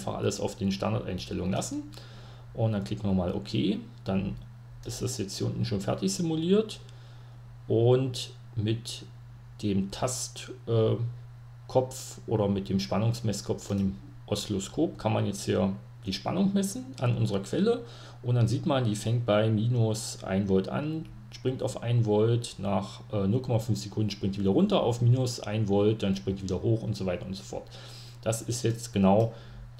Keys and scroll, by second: 5.8 Home.